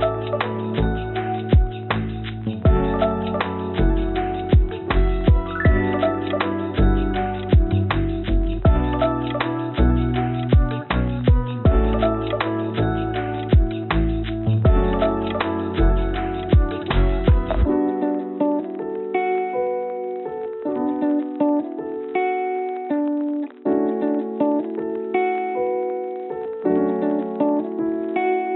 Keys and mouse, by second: 1.5-2.3 drag, 4.1 a, 4.7 s, 5.5 click, 6.0 click, 6.4 s, 10.1 n, 22.1 click, 22.6-24.9 drag, 24.3 0, 25.6-28.2 drag, 27.4 0.